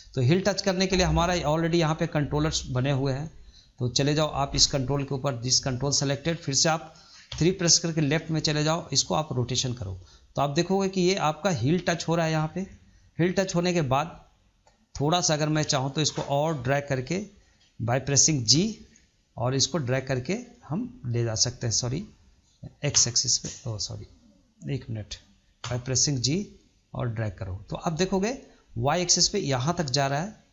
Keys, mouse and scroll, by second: 1.5-2.0 scroll up 2, 2.0-3.9 middle drag, 3.9 scroll up 2, 4.2-4.9 shift+middle drag, 4.9 drag, 5.5 click, 5.8 scroll down 2, 6.0-7.2 middle drag, 7.2 KP_3, 9.3 click, 12.0 scroll down 2, 12.6-15.4 shift+middle drag, 15.4 click, 18.4 g, 23.5-25.5 right drag, 25.5 g.